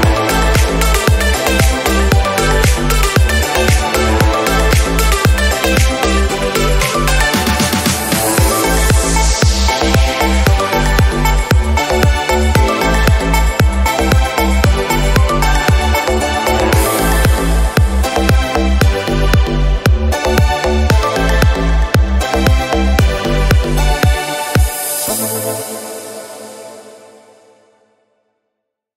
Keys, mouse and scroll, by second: 0.8 click, 0.9 scroll down 2, 1.3 shift+d, 2.1 r, 3.1 g, 5.3 click, 5.9 click, 6.2 KP_0, 7.9-8.3 scroll down 1, 8.3 click, 8.7 scroll down 1, 9.0-12.2 drag, 16.7-17.2 scroll down 2, 17.2 s, 18.3 scroll up 3, 24.6-26.6 drag, 26.8 scroll up 4, 27.8 scroll up 2, 28.4 click.